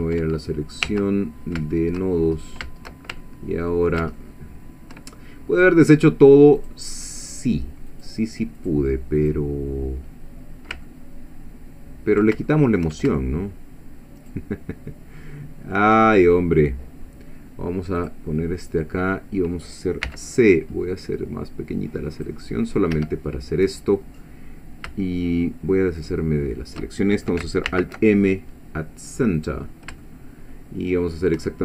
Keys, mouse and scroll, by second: 0.0 Tab, 0.5 middle click, 0.9 1, 1.7 shift+middle click, 2.2-2.7 shift+scroll up 1, 3.2 ctrl+shift+middle click, 4.2 ctrl+shift+middle click, 6.6 click, 7.3 click, 7.9 click, 8.6 click, 9.2 click, 10.9-12.4 ctrl+middle drag, 12.5 ctrl+shift+middle click, 14.2 shift+click, 15.2 shift+middle click, 18.0 click, 20.1 c, 20.7-21.2 scroll up 2, 22.2 click, 22.9 Escape, 26.0 shift+click, 27.7 alt+m, 29.4 click, 30.0-31.4 shift+middle drag.